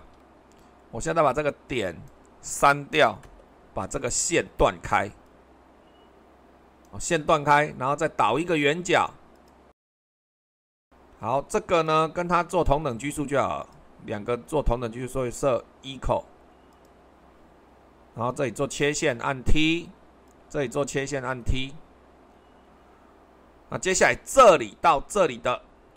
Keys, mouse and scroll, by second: 3.2 Delete, 16.7-17.8 drag, 18.3-22.5 drag.